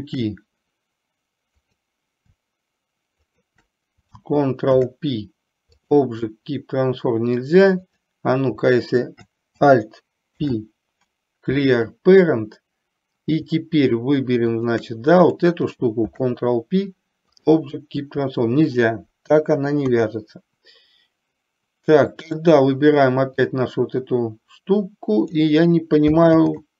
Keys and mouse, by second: 1.6 click, 4.8 ctrl+p, 8.0 click, 10.4 alt+p, 14.6 shift+click, 16.0 ctrl+p, 20.0 KP_3, 22.4 click, 23.8-25.5 drag, 26.5 ctrl+z.